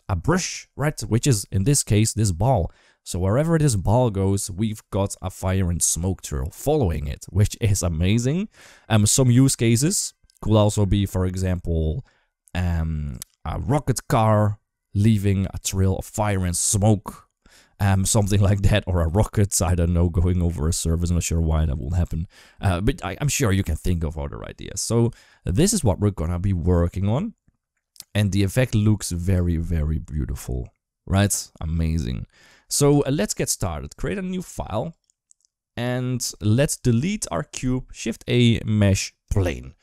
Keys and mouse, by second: 1.3 click, 26.4-29.1 drag, 29.8 space, 32.8 ctrl+space, 33.1 ctrl+s, 33.8-35.7 drag, 37.3 Delete, 37.8 shift+a.